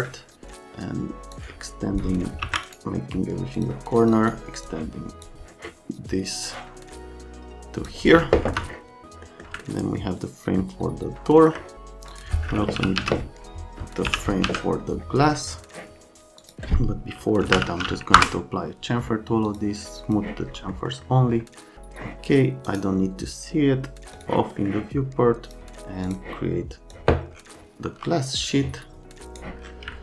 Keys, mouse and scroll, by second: 1.3 click, 2.4 ctrl+a, 3.6 click, 3.9 click, 4.1 click, 4.6 click, 6.4 click, 8.5 F3, 9.2 middle click, 9.6 alt+middle click, 11.2 middle click, 12.1 click, 12.5-14.4 typing, 16.4 click, 17.2-18.0 typing, 18.1 Return, 19.4 click, 20.0 click, 20.7 middle click, 22.6 right click, 24.1 click, 24.6 right click, 25.5 click, 26.1 click, 26.9 click, 28.4-29.4 drag, 29.9 alt+middle click.